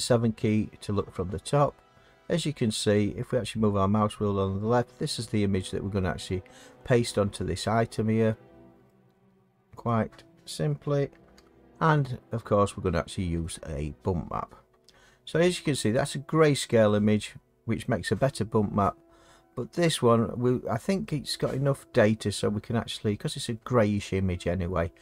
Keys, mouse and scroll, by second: 1.9-4.3 middle drag, 4.3 scroll, 8.3-8.7 scroll, 8.5 middle click, 8.7 middle click, 8.8 middle click, 9.8 middle click, 11.3 7, 13.8 scroll.